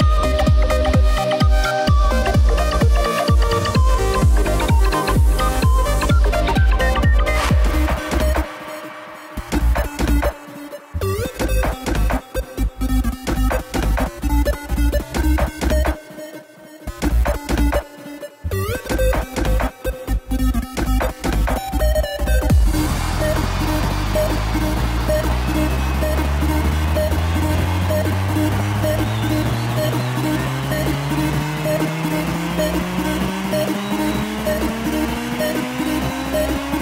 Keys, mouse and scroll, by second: 0.1-2.4 drag, 2.4 KP_0, 3.1 space, 4.9 space, 6.2-10.9 drag, 10.9 space, 14.1-26.7 drag, 35.4-36.8 drag.